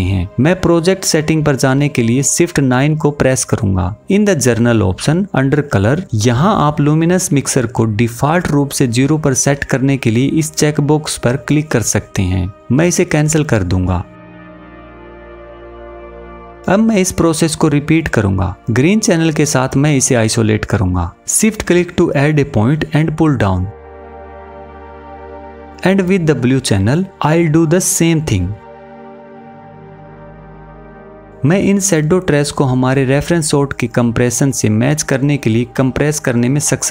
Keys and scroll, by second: 1.4 shift+9.